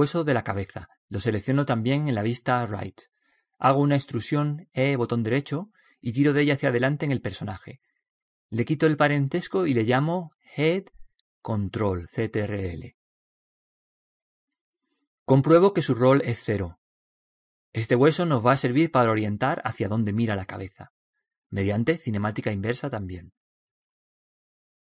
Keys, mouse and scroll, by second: 1.6 right click, 3.5 right click, 4.6 e, 6.7-8.5 drag, 9.8 right click, 10.7 middle click, 11.3-13.6 drag, 11.3 right click, 19.3-21.9 middle drag.